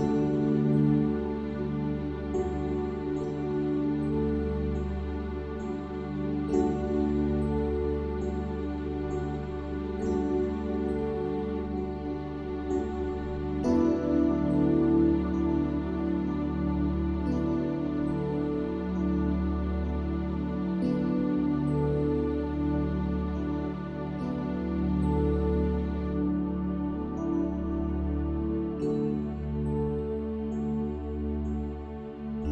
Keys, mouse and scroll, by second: 4.3 Tab, 5.2-7.0 middle drag, 8.0-10.3 middle drag, 11.3-14.1 middle drag, 15.1-18.4 drag, 19.9-21.8 drag, 24.7 shift+d, 26.3 p, 28.5 Tab, 29.3-32.5 drag, 32.2 Tab.